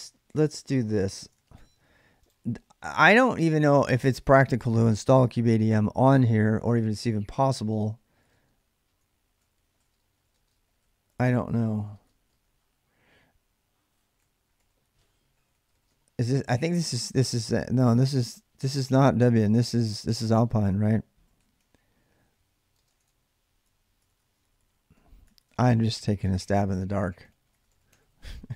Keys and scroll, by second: 7.7-12.3 typing, 13.7-16.4 typing, 15.4 Tab, 20.4-28.5 typing, 22.6 Tab, 22.8 Tab, 23.4 Tab.